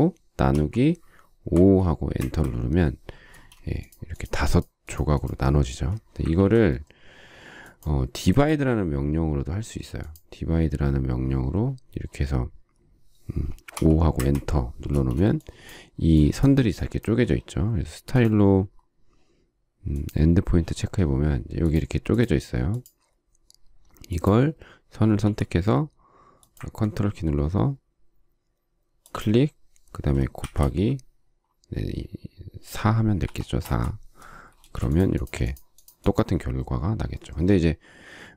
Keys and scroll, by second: 1.4 5, 2.0 Return, 3.1 space, 6.2 ctrl+z, 13.6 5, 14.0 Return, 14.7 space, 25.1 m, 30.2 shift+8, 33.1 4, 33.5 Return, 34.4 space.